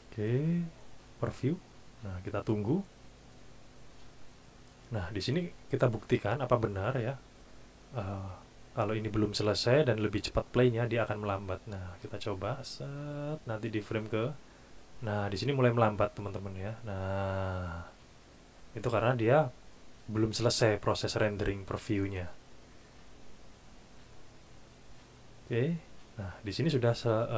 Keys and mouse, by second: 0.7 click, 11.8 click.